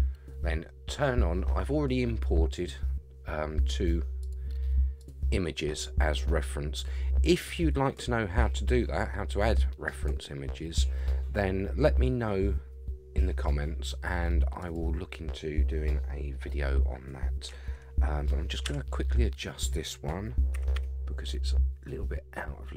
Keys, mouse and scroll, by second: 4.2 click, 5.0 click, 14.6 click, 18.6 KP_3, 20.5 g.